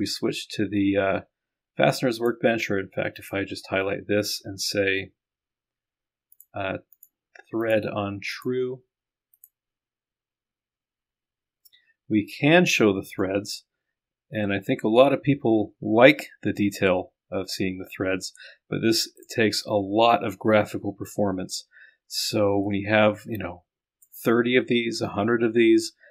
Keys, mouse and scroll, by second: 3.2 click, 3.2 right click, 6.4 click, 7.2 click, 7.6 click, 8.4 click, 9.4-10.0 scroll up 1, 13.1 click, 13.2-19.3 middle drag, 24.2 click.